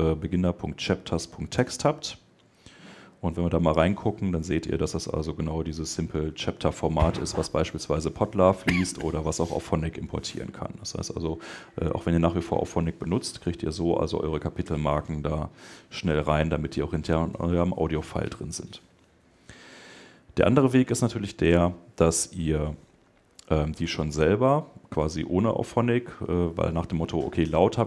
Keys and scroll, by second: 20.6 super+Tab.